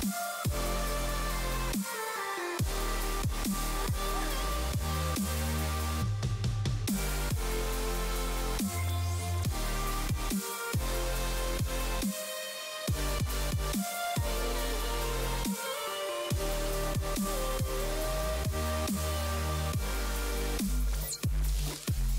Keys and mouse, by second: 4.4 click, 5.0 click, 6.5 click, 8.4 click, 10.9 x, 11.0 click, 11.2 x, 12.1 click, 12.3 click, 14.0 click, 14.3 x, 18.1 click, 19.3 click, 21.7 click.